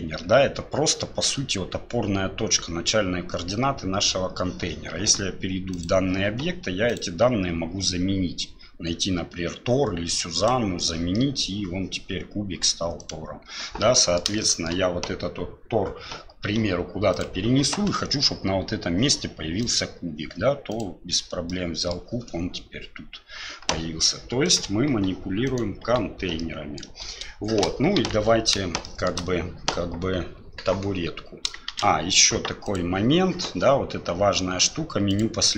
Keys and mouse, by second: 5.7 click, 6.9 click, 11.1-11.4 middle drag, 13.0 click, 13.9 middle drag, 14.4 shift+middle drag, 16.5 g, 19.6 click, 21.5-21.9 middle drag, 24.4 right click, 24.9 Delete, 25.4 right click, 25.8 Delete, 26.4-26.8 middle drag, 28.0 KP_1, 28.8 shift+drag, 31.7 shift+a, 35.1 click.